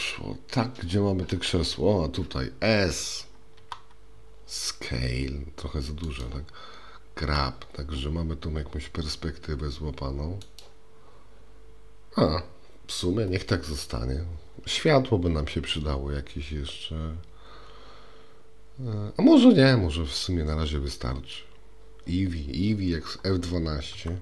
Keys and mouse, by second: 3.6 s, 7.3 g.